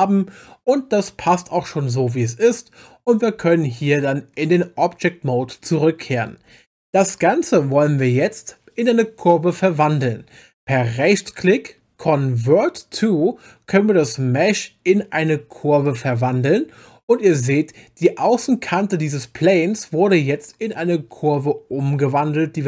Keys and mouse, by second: 3.4 Tab, 11.0-16.0 drag.